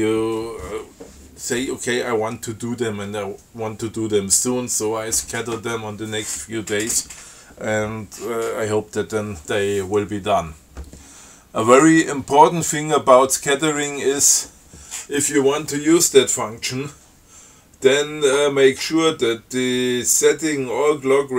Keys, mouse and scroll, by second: 13.9 click.